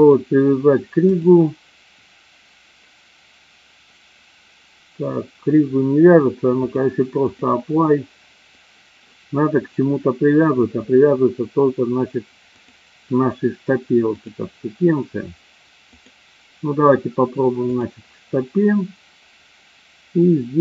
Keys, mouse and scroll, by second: 6.7-9.1 drag, 12.5 click, 14.2 click, 16.1 click.